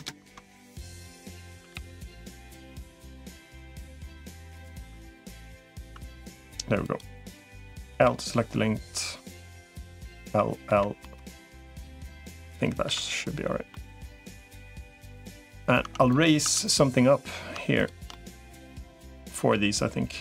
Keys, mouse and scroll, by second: 1.3 a, 1.5 g, 4.7 Tab, 5.3 middle click, 5.7 Tab, 6.7 click, 7.7 l, 10.1 l, 10.5 l, 10.8 middle click, 12.7 KP_7, 13.5-14.6 middle drag, 15.2 middle click, 15.7 Tab, 16.3 Tab, 16.7 middle click, 17.9-19.1 middle drag, 19.3-20.2 middle drag.